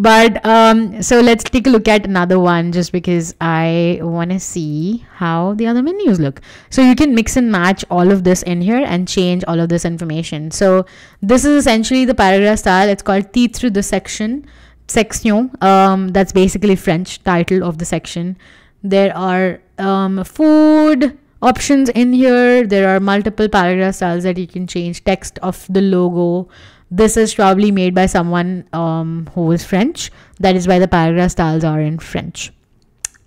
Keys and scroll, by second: 22.0 super+z, 25.5 Escape, 26.0 super+z, 30.3 Escape.